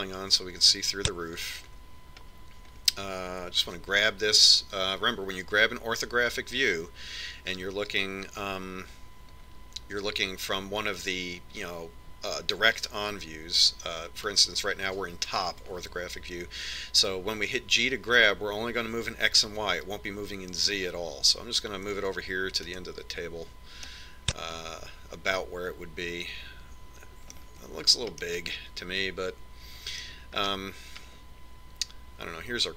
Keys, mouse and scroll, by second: 1.0 click, 3.8-5.9 middle drag, 5.1 g, 25.4-27.1 middle drag, 27.3 middle click, 29.0-31.8 middle drag, 32.0-32.7 middle drag.